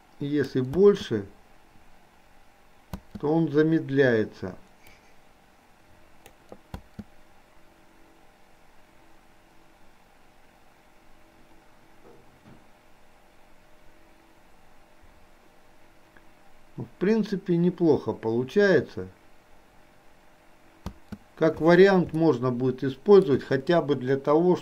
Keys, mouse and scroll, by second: 5.0 space, 5.1-6.3 drag.